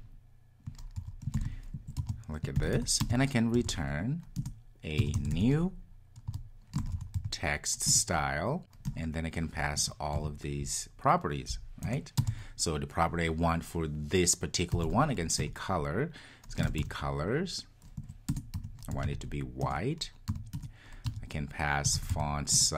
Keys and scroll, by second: 4.4 Return, 15.4 Return.